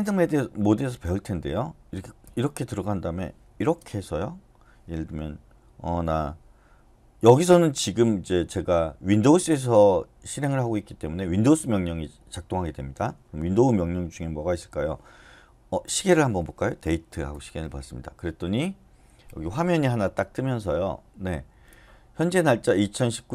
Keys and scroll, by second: 15.6-17.0 typing, 17.3 Return.